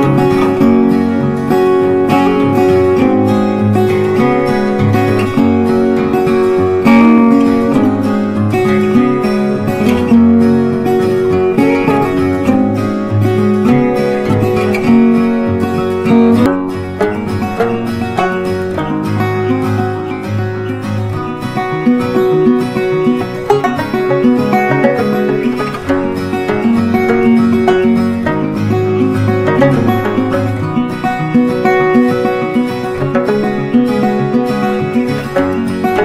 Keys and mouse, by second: 6.3 c, 7.2-9.6 drag, 10.9 c, 12.2-16.2 drag, 16.2-20.2 drag, 20.2 Down, 21.1 click, 22.9 c, 24.1-30.3 drag, 32.0 right click, 33.0 click, 34.5 Up.